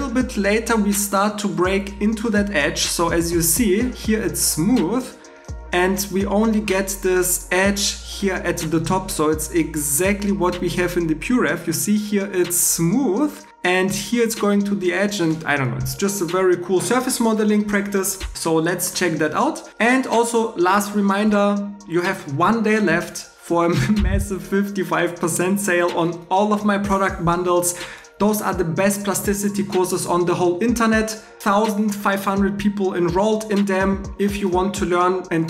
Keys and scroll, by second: 18.3 alt+e.